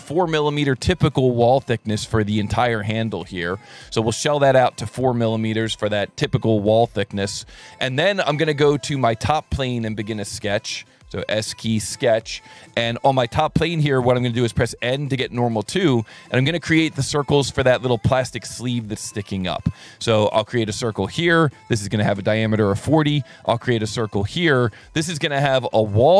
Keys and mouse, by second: 0.0 KP_4, 1.3 click, 2.4 click, 6.4 click, 9.5 click, 10.5 s, 11.6 click, 14.5 n, 15.4 s, 16.5 click, 17.8 click, 21.2 click, 21.9 KP_4, 22.0 KP_0, 24.1 click, 24.8 click, 25.2 Escape, 25.8 s.